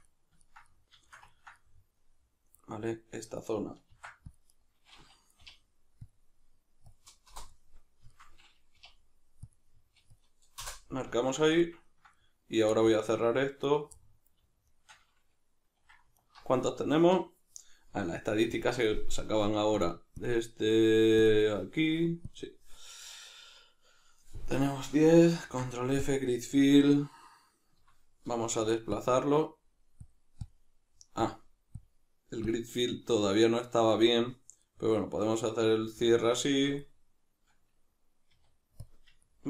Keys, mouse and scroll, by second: 3.9 ctrl+r, 4.7 right click, 5.5 k, 7.4 Return, 7.5-13.7 middle drag, 8.7 k, 10.7 Return, 13.7 right click, 14.0-14.7 middle drag, 14.7 shift+right click, 16.2 alt+right click, 18.5-19.8 drag, 20.2 click, 21.2-24.5 drag, 24.5-27.8 middle drag, 25.4 ctrl+f, 27.8 F9, 34.7-36.5 middle drag, 36.5 Tab, 36.9-38.3 middle drag, 38.3 q, 39.3-39.4 ctrl+middle drag.